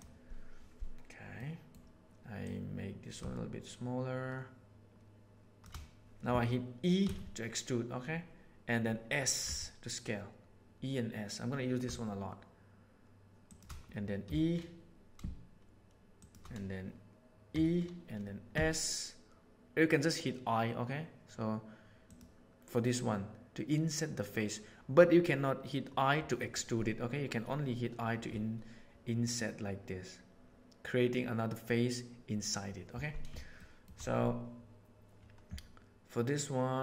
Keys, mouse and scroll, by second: 1.3 middle click, 2.5-5.6 drag, 7.0 e, 14.2 e, 17.4 e, 33.6 shift+middle click.